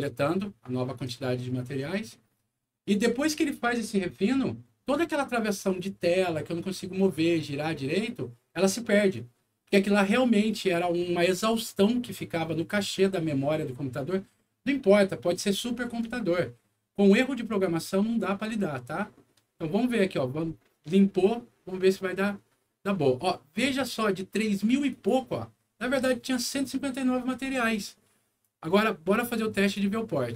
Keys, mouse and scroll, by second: 24.9 click, 28.4 click, 29.6 click.